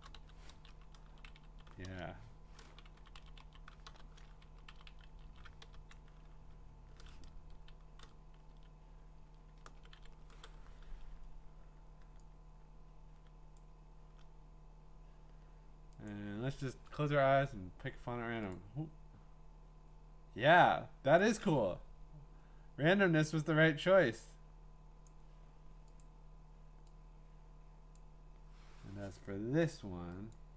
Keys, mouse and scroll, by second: 0.0-0.7 typing, 1.9 BackSpace, 3.8 BackSpace, 4.6 Down, 4.7 Down, 4.9 Down, 5.1 Down, 5.2 Down, 7.3 Up, 8.0 Up, 8.5 ctrl+shift+Down, 9.2 Up, 9.7 ctrl+shift+Left, 9.9 ctrl+shift+Left, 13.5 click, 16.1 click, 16.5-17.8 scroll, 18.5 click, 25.0 click, 26.0 click, 27.9 click, 30.3 click.